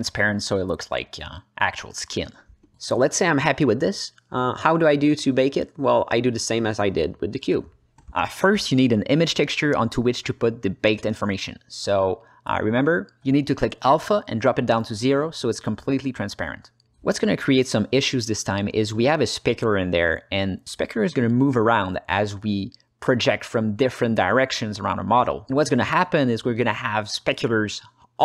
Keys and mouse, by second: 0.3-1.9 drag, 2.5 middle click, 3.3 drag, 3.8 ctrl+space, 4.9-5.3 ctrl+alt+middle drag, 5.6-6.5 alt+middle drag, 6.5 shift+a, 8.7-16.9 drag, 10.6 BackSpace, 18.2 alt+middle click, 18.8 ctrl+space, 19.7 alt+middle click, 20.4-21.5 ctrl+alt+middle drag, 21.7-28.2 middle drag.